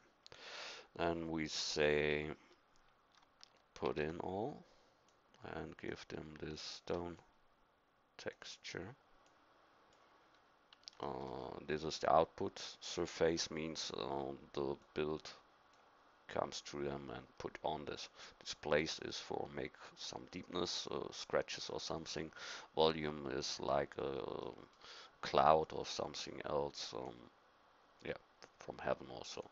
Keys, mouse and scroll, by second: 3.9 ctrl+v, 5.1 click, 9.4 click, 10.3-13.8 middle drag, 14.8-16.8 drag, 24.4-25.6 middle drag, 25.7 middle click, 25.8 middle click, 27.1 click, 29.4 click.